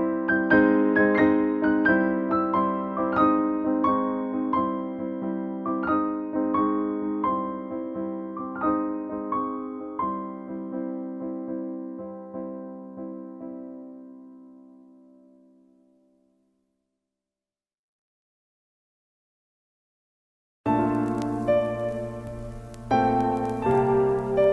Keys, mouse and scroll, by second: 2.5 v, 3.9 space, 5.3 click, 11.1 click, 23.0 click, 24.2 click.